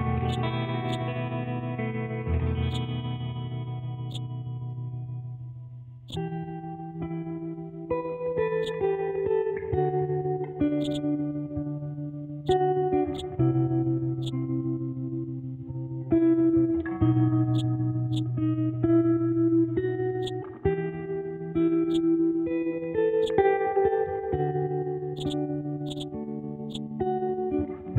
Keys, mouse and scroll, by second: 9.6-10.5 scroll up 1, 10.8 click, 11.3-11.6 scroll down 1, 12.4-20.2 drag, 21.9-27.9 drag.